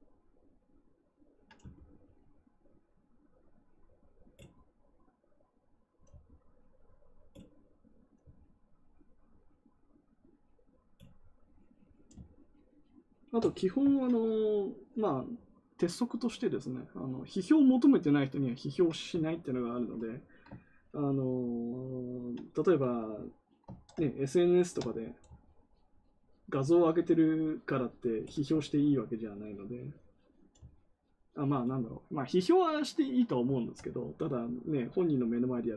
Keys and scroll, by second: 23.6 ctrl+z.